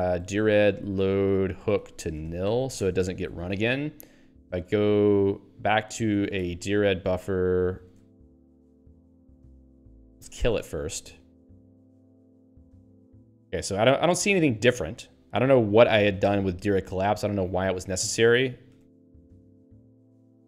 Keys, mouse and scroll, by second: 0.0-3.0 typing, 3.3 ctrl+s, 7.7 ctrl+n, 8.1 Return, 9.3 g, 10.5 Return, 11.9 super+e, 16.3 ^, 19.2-20.4 typing.